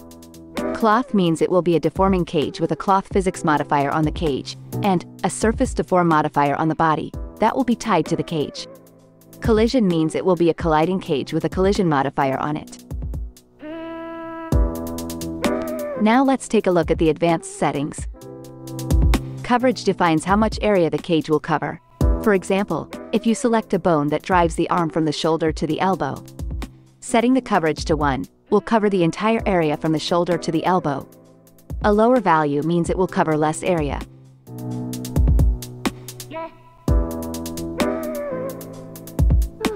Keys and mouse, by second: 8.5 click, 18.5 click, 25.4 click, 28.0 ctrl+Tab, 28.3 click, 28.6 r, 29.6 ctrl+Tab, 35.6-39.7 drag.